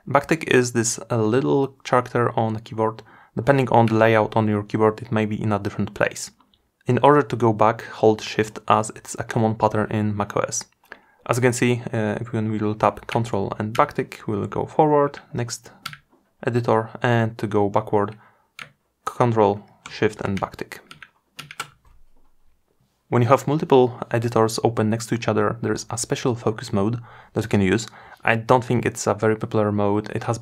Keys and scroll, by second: 13.7 ctrl+`, 18.2 ctrl+shift+`.